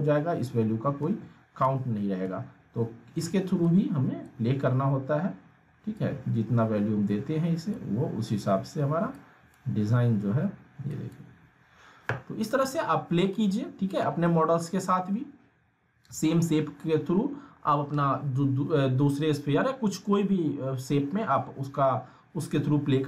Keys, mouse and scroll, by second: 1.0 ctrl+z, 3.6-4.2 drag, 9.4 drag, 12.8-13.4 alt+middle click, 13.4 scroll down 1, 13.5-14.1 alt+middle click, 14.1 scroll up 1, 14.2-15.2 alt+middle drag.